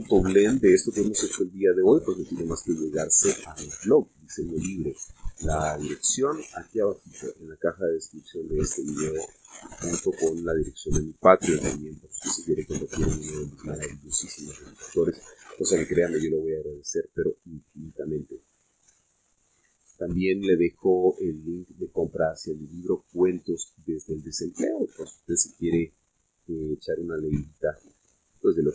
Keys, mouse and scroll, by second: 3.7-4.6 drag, 4.8-5.4 middle drag, 6.4-9.5 drag, 9.8-11.9 drag, 12.0-14.1 drag, 18.6 click, 19.6 click, 21.0 click, 22.7 click, 24.2 click, 25.6-28.7 middle drag.